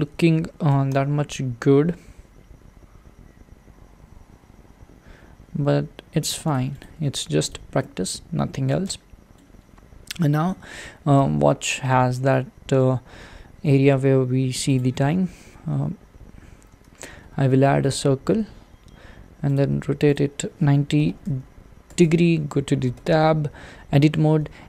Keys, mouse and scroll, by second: 0.7 s, 6.8 click, 7.1 Tab, 7.5 click, 7.7-11.2 middle drag, 14.7 shift+right click, 16.5 scroll up 1, 18.0 shift+a, 21.9-23.0 drag, 23.0 Tab.